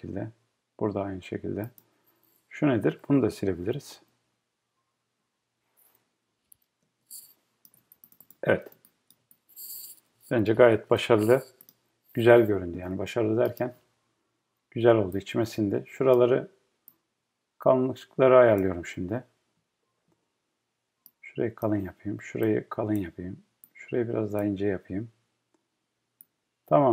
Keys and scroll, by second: 4.0 BackSpace.